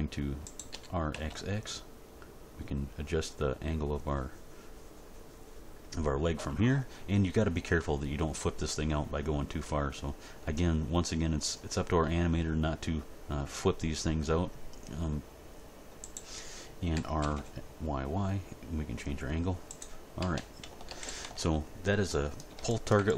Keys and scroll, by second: 0.7 r, 1.1 x, 16.9 r, 17.2 y, 20.2 a, 20.9 alt+r, 21.0 alt+g, 21.2 alt+s.